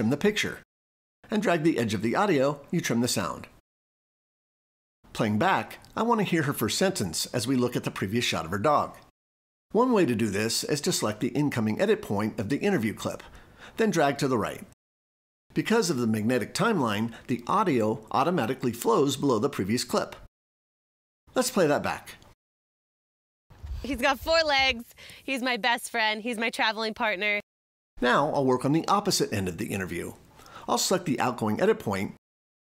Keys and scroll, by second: 4.6 l.